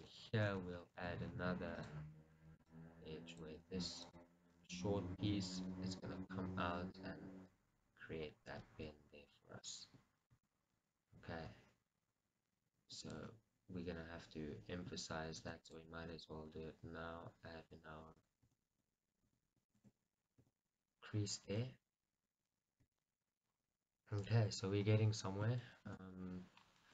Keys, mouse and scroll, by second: 3.0 right click, 3.7 click, 4.2-5.4 drag, 5.4 g, 9.9 click, 11.9-13.3 scroll, 13.5 z, 18.4 click, 18.8 Tab, 19.9 shift+z, 20.3-20.8 scroll down 2, 21.4-21.9 scroll down 2, 21.9 Tab, 22.7-23.2 scroll up 2, 23.2 Tab, 23.6-25.1 scroll down 2, 25.1-26.0 scroll down 1, 26.0 shift+z, 26.4-26.8 scroll up 2.